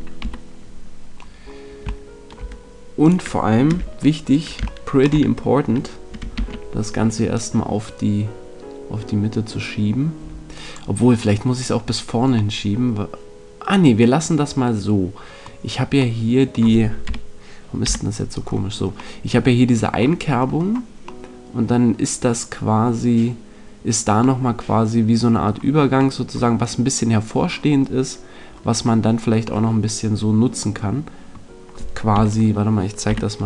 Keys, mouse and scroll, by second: 0.1 KP_3, 3.0-4.8 right drag, 4.8-6.3 middle drag, 6.3 ctrl+l, 7.3 click, 12.5-14.3 middle drag, 15.9-17.8 middle drag, 17.0 KP_Decimal, 17.8 KP_5, 19.1-24.7 middle drag, 32.1 KP_3, 33.0 KP_5.